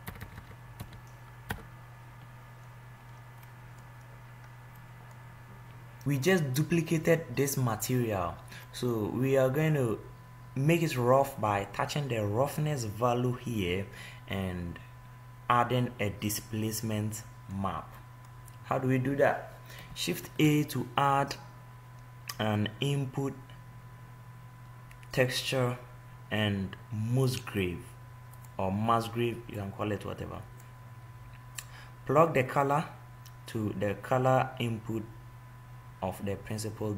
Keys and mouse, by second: 9.0 middle click, 20.5 shift+a, 29.9-33.3 drag.